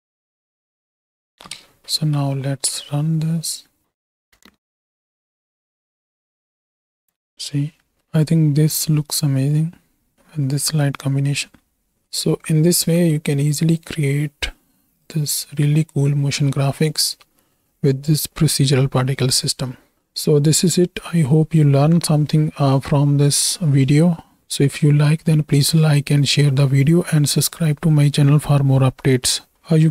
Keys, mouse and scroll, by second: 1.7 ctrl+space, 2.8 space, 4.4-6.0 typing, 7.1-11.9 middle drag, 7.1 space, 12.1 ctrl+space, 13.8 click, 14.9 click, 16.2 middle click, 16.9 click, 17.4 click, 20.2 shift+middle click.